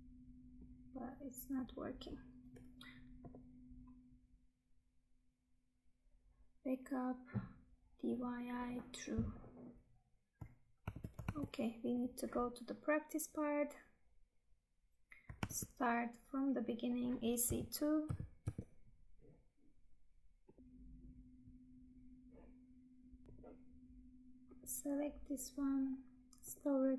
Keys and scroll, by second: 10.9 Tab, 16.6 Tab, 20.6 Tab.